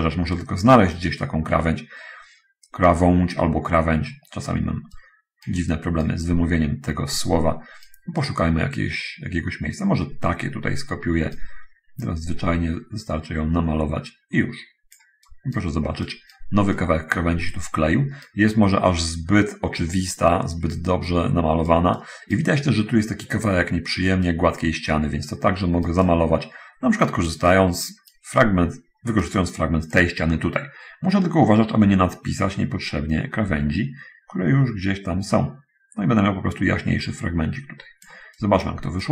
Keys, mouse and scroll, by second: 0.6-4.9 right drag, 5.2-6.5 right drag, 6.5-7.8 middle drag, 7.8 right click, 8.3 middle click, 8.5-11.5 right drag, 12.4-15.4 drag, 15.6 right click, 17.0-18.7 right drag, 20.8-22.8 right drag, 24.6-26.3 right drag, 27.0-27.7 right drag, 28.6-29.6 right drag, 30.2-38.5 drag, 38.6 right click.